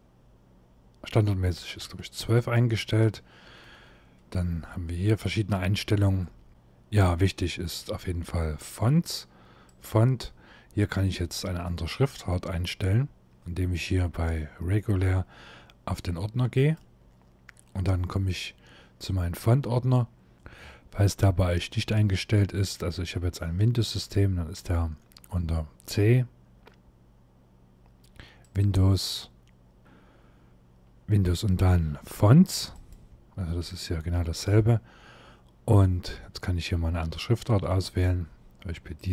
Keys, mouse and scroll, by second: 4.3-5.0 scroll down 1, 5.0-5.7 scroll down 1, 9.4 click, 11.3 shift+middle click, 16.2 click.